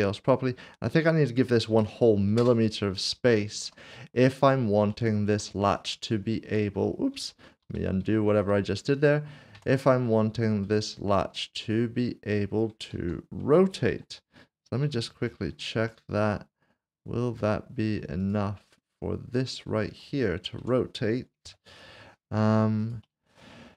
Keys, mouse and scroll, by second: 1.7 typing, 2.4 Return, 3.3 shift+middle click, 3.9 scroll up 1, 4.9 click, 5.8 click, 6.4 Tab, 7.3 ctrl+z, 8.8 click, 10.6 middle click, 11.4 scroll down 1, 12.9 alt+z, 13.9-14.9 typing, 16.3 typing, 17.4 middle click, 18.2 click, 20.6 Tab, 21.5 3, 22.8 click.